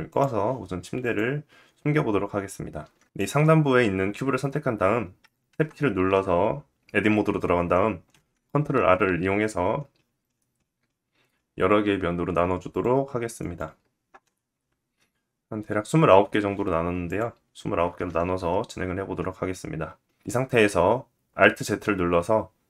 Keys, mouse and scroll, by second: 0.6 click, 3.0 click, 5.1 Tab, 7.6 ctrl+r, 16.6 click, 16.7-22.6 middle drag, 21.4 alt+z.